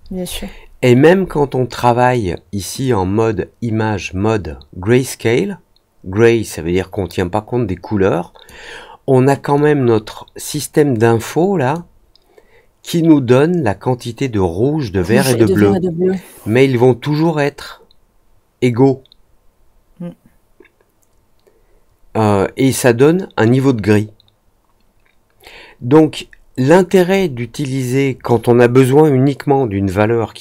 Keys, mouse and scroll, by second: 2.7-8.4 drag, 9.5-11.7 drag.